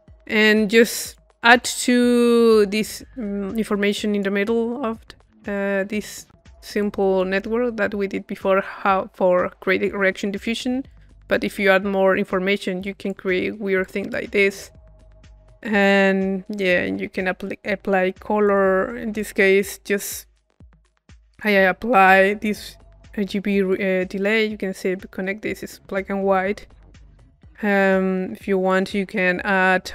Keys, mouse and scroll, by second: 0.7-4.9 drag, 6.8-7.9 drag, 10.9-12.3 drag, 12.8-14.6 drag, 14.7-15.9 drag, 15.9-17.2 middle drag, 18.4 click, 21.1 click, 22.5 click, 23.7-25.1 drag, 25.4 click, 28.4-29.8 drag.